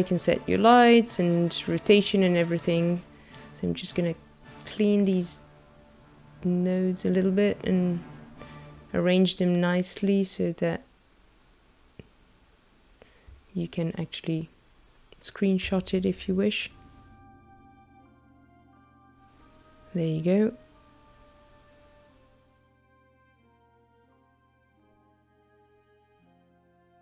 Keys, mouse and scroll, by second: 0.2 click, 1.8-3.1 scroll down 3, 2.2 middle click, 3.1 click, 4.0 click, 4.8 click, 5.7 click, 6.6 click, 8.9 click, 9.8 click, 12.0 click, 13.1 click, 14.3 click, 17.5-18.5 scroll up 1, 18.5 scroll up 2, 18.7 shift+middle click, 22.3-22.9 scroll up 6, 23.4-24.3 scroll up 3, 24.9 shift+middle click, 26.1-26.5 scroll up 2, 26.7 shift+middle click.